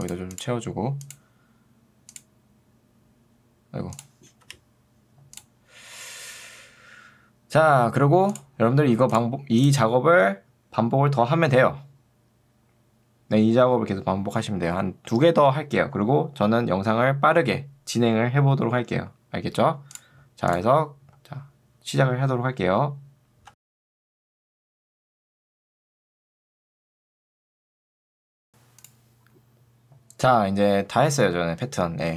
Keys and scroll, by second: 23.5 ctrl+d, 24.1-26.0 typing, 26.0 ctrl+d, 27.4 space, 27.8 ctrl+z, 28.0 space, 28.4 space.